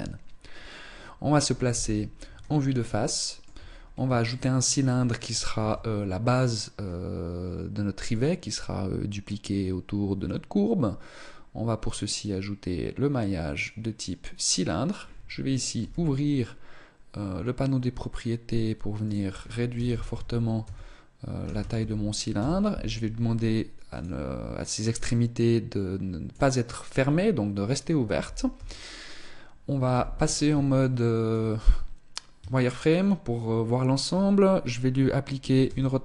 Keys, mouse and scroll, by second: 1.5 KP_1, 2.8 shift+middle click, 3.5-3.9 scroll up 4, 4.1 shift+middle click, 5.4 shift+a, 15.6 t, 18.9 click, 23.7 click, 27.0 scroll up 3, 28.3 t, 29.7 z, 30.6 shift+middle click, 31.1-31.9 scroll up 2, 32.1 shift+middle click, 35.5 r.